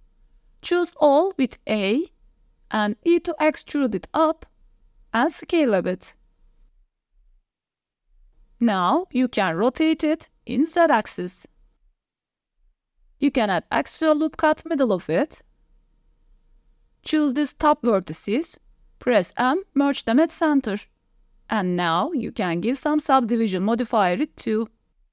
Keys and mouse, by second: 0.2 middle click, 0.8 Tab, 1.1 middle click, 1.7 Tab, 2.0 a, 2.8 e, 3.0 z, 5.0 click, 5.3 middle click, 6.2 s, 7.1 ctrl+z, 7.2 KP_7, 7.7 s, 8.2 click, 9.2 r, 11.2 click, 12.0 r, 12.8 click, 12.8 Tab, 13.0 ctrl+r, 13.7 click, 14.1 s, 15.6 click, 16.0 click, 16.6 alt+click, 17.2 click, 17.6 alt+click, 17.9 click, 18.4 m, 19.2 Tab, 19.4-20.1 drag, 21.5 ctrl+1, 22.4 middle drag, 22.8 click, 23.2 right click, 23.8 middle drag, 24.5-24.8 middle drag, 24.9 Tab.